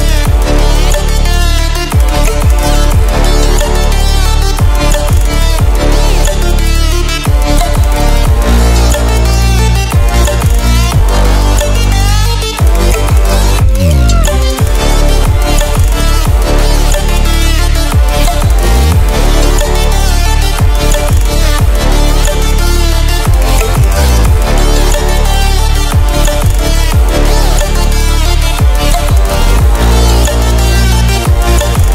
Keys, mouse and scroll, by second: 3.6-8.0 drag, 7.8 ctrl+alt+scroll down 1, 8.6-15.1 drag, 15.1 ctrl+alt+scroll down 1, 16.6-17.9 drag, 17.9 ctrl+z, 18.6-20.8 drag, 20.8 ctrl+alt+scroll up 1, 23.1-25.6 drag, 25.6 ctrl+alt+scroll down 1, 26.0 ctrl+alt+scroll up 1, 27.1-31.9 drag.